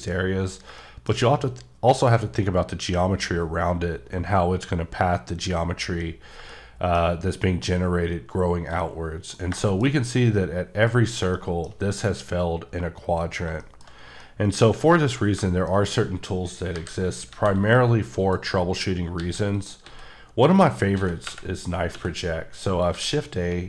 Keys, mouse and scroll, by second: 0.6 scroll down 1, 0.8 shift+middle click, 4.7 middle click, 4.9-5.9 scroll down 2, 6.5 shift+middle click, 8.7 shift+scroll down 1, 8.8 shift+middle click, 9.6 shift+double middle click, 9.9-11.1 shift+scroll up 2, 11.3 shift+scroll down 1, 11.3 shift+middle click, 11.7-12.5 shift+scroll up 2, 12.8-13.4 scroll down 6, 13.6 shift+middle click, 13.9 scroll, 14.2 middle click, 16.7 KP_5, 17.3 shift+a, 18.2 click, 19.2 g, 19.5 click, 19.8 s, 20.6 click, 20.9 s, 21.2 y, 21.9 x, 22.6 click, 22.9 g.